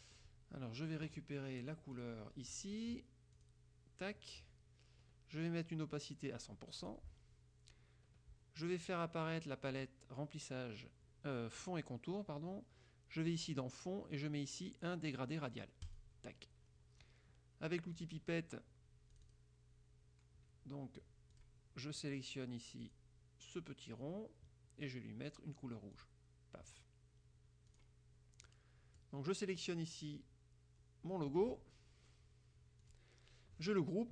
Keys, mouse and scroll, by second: 2.1 click, 3.5 click, 6.5 right click, 6.9 click, 9.8 click, 13.3 click, 16.0 click, 18.1 click, 19.3 click, 21.5 click, 23.0 click, 26.1 click, 27.9 click, 28.6 click, 32.9 click.